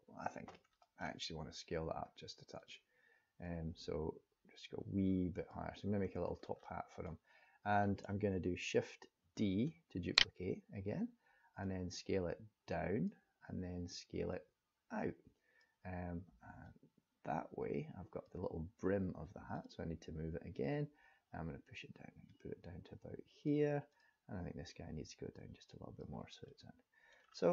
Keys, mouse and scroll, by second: 0.8 middle click, 2.5 click, 3.5 click, 6.2 scroll down 1, 6.6 middle click, 7.9 middle click, 9.2 shift+d, 11.6 click, 14.3 click, 16.6 click, 19.5 click, 20.6 click, 23.8 click, 24.7 click, 26.5 middle click, 27.2-27.5 scroll down 4.